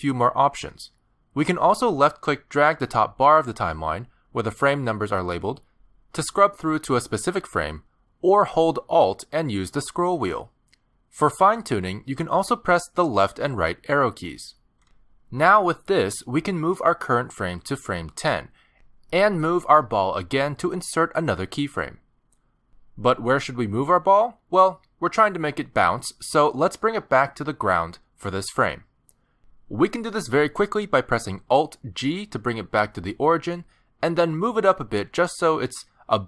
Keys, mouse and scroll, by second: 3.1 click, 9.8-11.4 alt+scroll up 20, 11.4-11.9 alt+scroll down 1, 11.9-12.5 alt+scroll down 9, 12.5-13.2 alt+scroll down 1, 13.2 Right, 13.6 Right, 14.6 Right, 14.8 Right, 15.1 Left, 15.3 Left, 15.5 Left, 15.7 Left, 15.9 Left, 16.1 Left, 16.3 Left, 17.1 Left, 17.5 Left, 18.2 Left, 18.6 Left, 22.0 middle click, 22.7 g, 25.3 middle click, 29.3 middle click, 30.7 alt+g, 31.7 shift+middle click, 32.1 scroll up 4, 32.3 middle click, 32.9 g, 35.0 middle click, 36.2 scroll down 1.